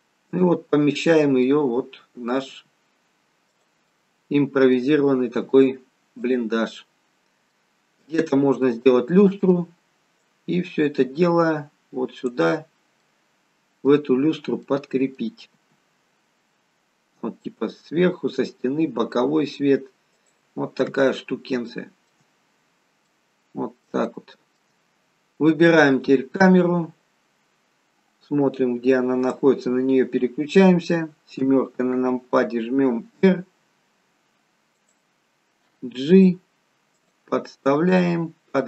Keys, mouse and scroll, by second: 1.2-1.9 scroll up 3, 1.5 middle click, 2.6 g, 3.9 middle click, 5.1-5.6 scroll up 2, 5.6 g, 6.8-7.6 scroll down 4, 7.6 middle click, 8.7 middle click, 10.3 click, 12.7-14.3 scroll up 4, 13.1 middle click, 14.3-14.8 scroll down 2, 14.8 middle click, 15.6 g, 21.0-21.6 scroll down 2, 21.8 shift+middle click, 22.4-23.9 scroll up 4, 23.2 middle click, 24.1 shift+middle click, 26.1 click, 27.3-28.9 scroll down 10, 28.9-29.3 scroll down 1, 29.3 click, 31.5 KP_7, 33.1 r, 35.8 g, 38.0 click.